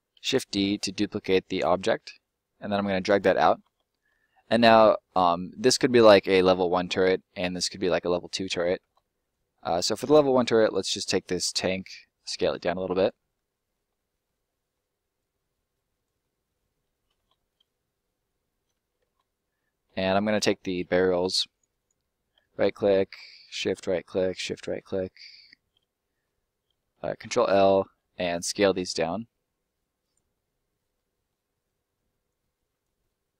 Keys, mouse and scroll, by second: 0.1 shift+d, 0.8 middle click, 3.1 click, 3.2 middle click, 3.8 scroll up 1, 4.1 middle click, 5.2 scroll down 1, 5.3 middle click, 9.1 right click, 10.6 right click, 11.1 ctrl+right click, 11.5 ctrl+l, 12.3 s, 13.0 click, 13.1 middle click, 13.7 scroll up 1, 13.9 middle click, 15.1 click, 16.1 middle click, 17.3 scroll down 1, 17.4 middle click, 20.1 middle click, 20.6 right click, 22.3 ctrl+right click, 22.9 ctrl+right click, 23.4 shift+right click, 23.8 middle click, 24.1 shift+middle click, 24.5 shift+right click, 25.7 right click, 26.0 middle click, 26.9 ctrl+middle click, 27.1 ctrl+l, 28.1 s, 29.9 click, 30.3 middle click, 32.2 click, 33.0 middle click.